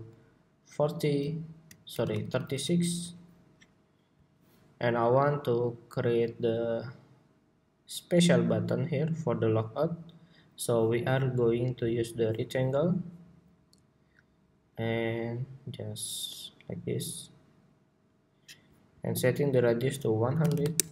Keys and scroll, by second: 1.7 alt+Left, 1.9 alt+Left, 2.1 alt+Left, 2.2 alt+Left, 3.0 alt+Left.